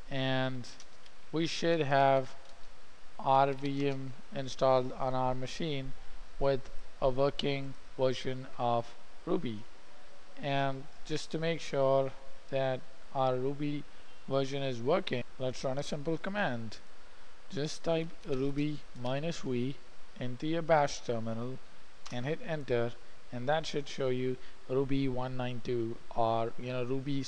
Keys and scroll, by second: 18.2-20.0 typing, 22.5 Return.